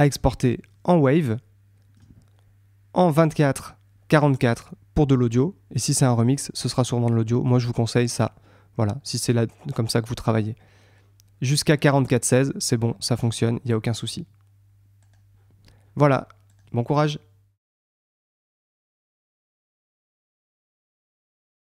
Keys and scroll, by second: 16.9 super+Tab.